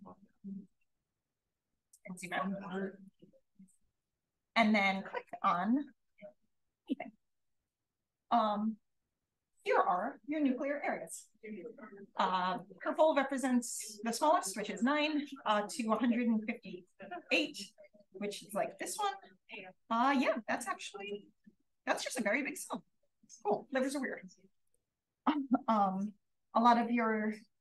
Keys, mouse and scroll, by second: 0.9-1.4 scroll up 1, 15.9-16.6 scroll up 2, 18.9 d, 19.4 d, 20.0 d, 21.9 d, 22.7 d, 23.6 d, 24.0 d, 24.6-25.1 drag, 25.9-27.0 scroll up 1, 26.4-27.0 drag, 27.0-27.6 scroll up 1, 27.0 d.